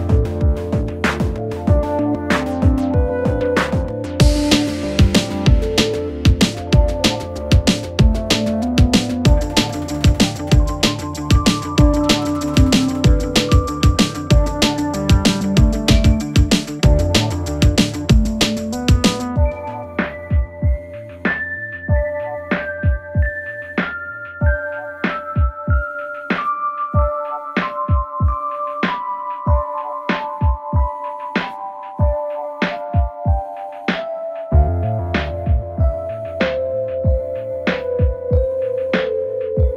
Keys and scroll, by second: 1.1 ctrl+d, 1.3 Escape, 13.9 ], 14.8 ], 16.1 4, 18.1 3, 24.0 F9, 28.7 ctrl+d, 28.8 Escape, 33.1 4, 33.5 2, 36.1 ].